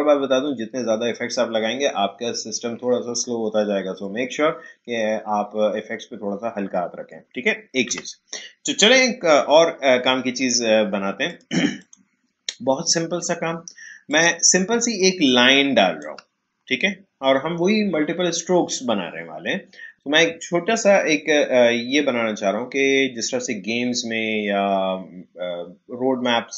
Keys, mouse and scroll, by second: 7.8 Delete, 9.5-10.0 alt+scroll down 1, 11.2-18.5 drag.